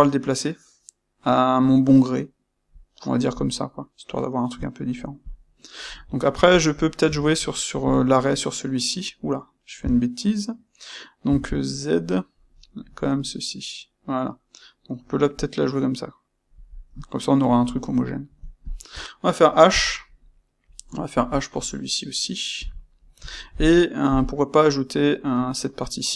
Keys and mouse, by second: 5.2 click, 6.5 click, 7.0 space, 7.9 space, 16.5 click, 16.8-18.6 middle drag, 18.6 shift+click, 19.7 h, 21.3 click, 22.5 h, 22.9-26.1 middle drag, 24.0 KP_1.